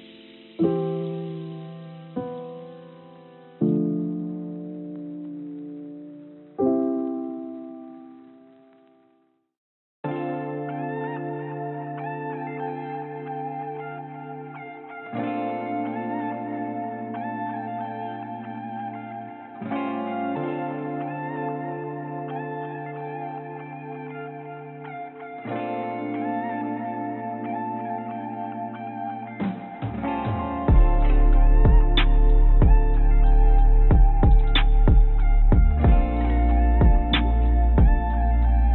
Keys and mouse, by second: 4.4 click, 5.0 g, 7.1 g, 9.8 click, 10.6 click, 11.3 g, 15.4 g, 27.3 click, 28.1 shift+d, 33.1 g, 34.7 z, 35.4 g, 37.0 g.